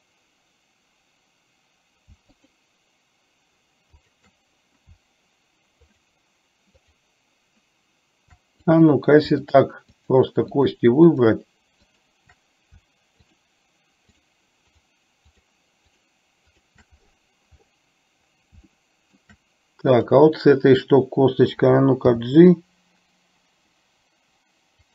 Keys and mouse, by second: 2.5 shift+click, 4.0 shift+click, 6.0 shift+click, 6.9 shift+click, 8.6 click, 10.0 shift+click, 10.7 shift+click, 11.1 shift+click, 12.0 shift+click, 13.2 shift+click, 14.2 shift+click, 14.7 shift+click, 16.0 shift+click, 18.7 shift+middle click, 22.1 g.